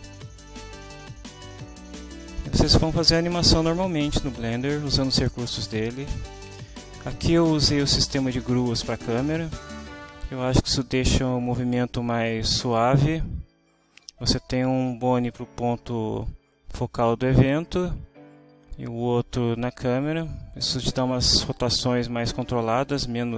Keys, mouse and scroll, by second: 5.1 click, 6.2-6.5 scroll down 1, 6.5 scroll up 1, 6.6 scroll down 1.